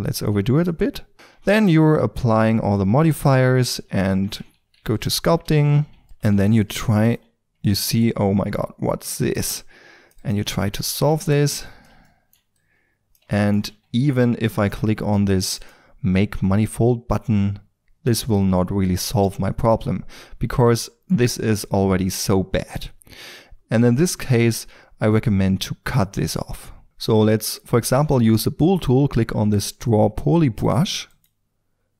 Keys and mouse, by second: 0.2-0.8 drag, 1.2 Tab, 2.6-3.8 drag, 3.8 Tab, 4.7 f, 5.0-5.4 drag, 5.4 ctrl+d, 6.3 f, 6.7-8.6 drag, 9.5 drag, 10.4 drag, 10.8 f, 12.0 drag, 12.2 click, 13.6 Tab, 18.9-19.2 middle drag, 20.4 ctrl+z, 27.4-29.6 drag, 31.1-31.9 drag.